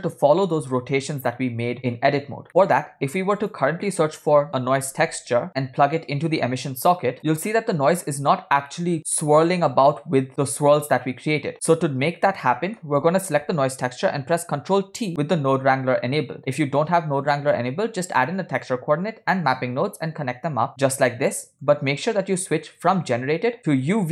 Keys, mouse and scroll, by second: 2.5 middle click, 2.5 scroll up 2, 3.2 shift+a, 5.5-7.2 drag, 7.2 middle click, 7.2 scroll up 3, 8.5 scroll down 2, 8.7 middle drag, 11.5 middle click, 11.7 scroll up 2, 12.4 click, 12.5 middle click, 14.6 ctrl+t, 20.7 click, 21.3 middle click.